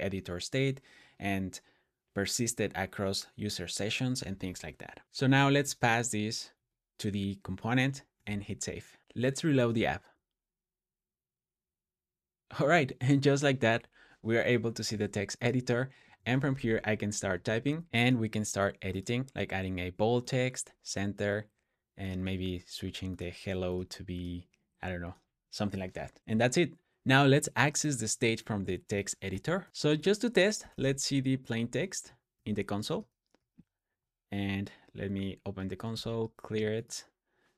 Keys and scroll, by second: 5.0 Escape, 5.0 j, 5.2 j, 5.5 j, 6.4 Tab, 8.0 super+s, 16.3 shift+h, 17.7 typing, 28.7-29.1 typing, 29.5 Return, 29.7 Tab, 30.3-31.1 typing, 31.5 Tab, 32.2 super+s, 32.8 super+j, 33.2 super+j.